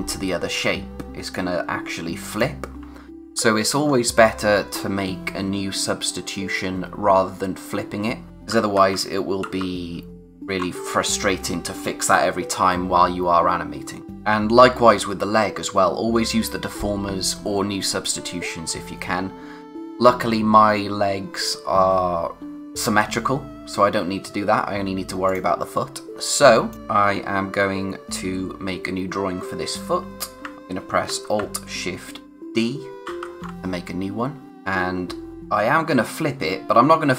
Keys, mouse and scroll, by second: 1.3 click, 3.3-3.8 scroll down 1, 8.3 ctrl+z, 14.1 click, 14.9-15.3 scroll up 1, 23.8-25.3 scroll up 1, 25.3 click, 26.9-27.4 scroll down 1, 33.0 alt+shift+d, 34.5 click.